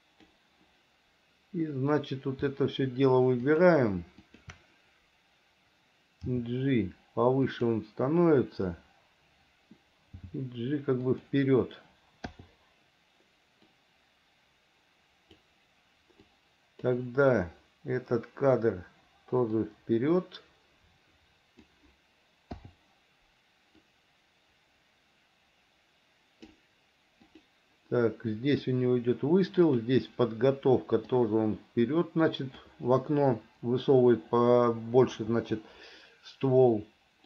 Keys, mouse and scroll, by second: 3.6 shift+click, 4.4 shift+click, 6.5 g, 10.3 g, 12.5 i, 14.0-15.7 drag, 16.5 click, 19.7-21.9 drag, 24.0-26.8 drag, 27.5 click, 29.9 click, 31.3-32.9 drag.